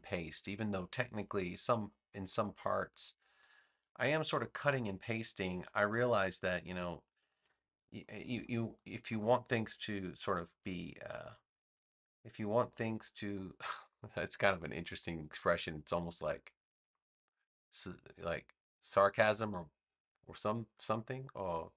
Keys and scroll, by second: 5.6 v, 7.3 super+c, 7.9 space, 10.1 super+v.